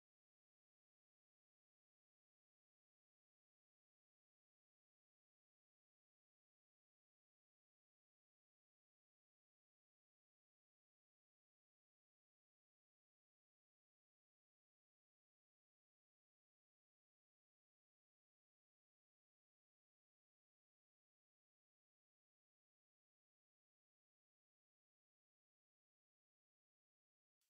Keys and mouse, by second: 4.7 s, 11.0-16.2 drag, 16.2-27.4 middle drag.